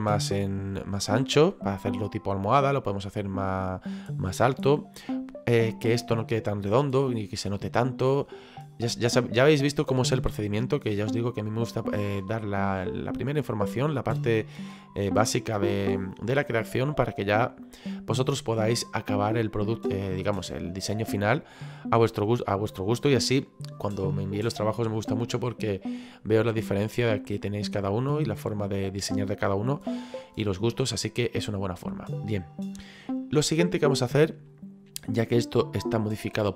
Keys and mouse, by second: 7.7 middle click, 13.1 middle click, 14.3 middle click, 17.2 middle click.